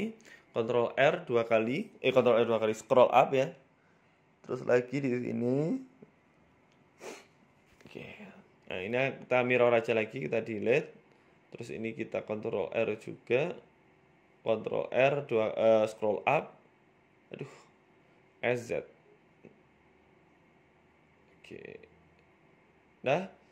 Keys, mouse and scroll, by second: 0.6 ctrl+r, 2.2 s, 4.8 ctrl+r, 6.9 ctrl+r, 7.9 click, 9.2 Delete, 10.6 click, 11.9-12.2 scroll up 3, 12.1 shift+middle click, 12.7 ctrl+r, 15.8 ctrl+r, 16.6 z, 17.4 z, 19.0 s, 19.6 s.